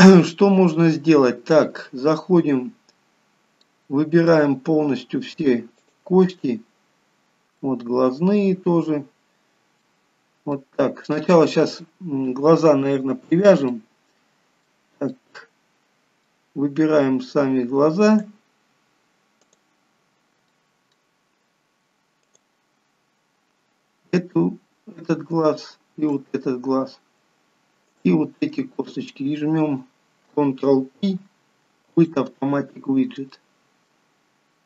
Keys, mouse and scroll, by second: 0.9-2.6 scroll up 1, 3.0-3.8 scroll down 2, 3.8 middle click, 6.0 shift+click, 7.4-7.8 scroll up 2, 8.3 shift+click, 9.9 middle click, 11.3 shift+middle click, 13.9 middle click, 15.3 middle click, 18.3 click, 20.7 click, 20.7 middle click, 21.5 scroll up 2, 23.7 click, 25.4 shift+click, 33.5 ctrl+p, 33.5 middle click, 34.3-34.6 scroll down 2.